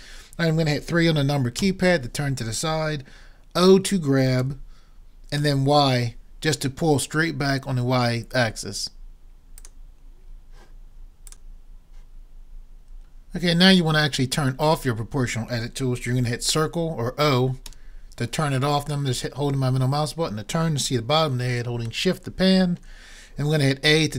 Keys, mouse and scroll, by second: 1.6 KP_3, 4.4 g, 9.7-11.3 drag, 17.7 o, 19.1-20.1 middle drag, 20.5 click, 20.5 middle click, 20.5 right click, 21.5 click, 21.5 middle click, 21.5 right click, 22.4-23.6 drag, 22.4-23.8 middle drag, 22.4-23.6 right drag.